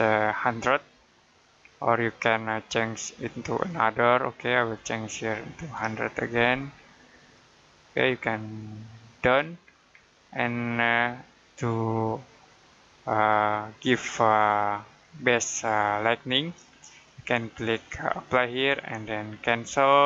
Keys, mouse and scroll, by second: 0.1 middle click, 3.4 click, 5.5-6.7 typing, 7.0 click, 9.9 middle click, 10.5 middle click, 12.2 middle click, 13.3 shift+middle click, 18.1 click.